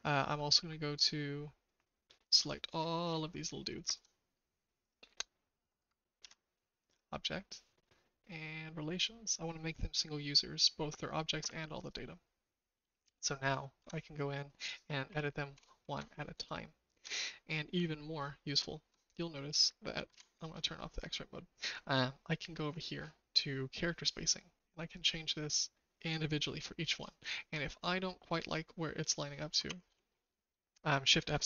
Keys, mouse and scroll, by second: 3.6 shift+click, 6.2 ctrl+z, 6.8-11.8 drag, 12.9 shift+drag, 13.7 Tab, 15.0 KP_2, 15.5 KP_Enter, 15.9 Tab, 16.5 shift+click, 17.2 middle click, 18.5 shift+click, 20.1 alt+z, 24.6-26.9 drag, 27.3 shift+middle click, 29.6 shift+KP_7.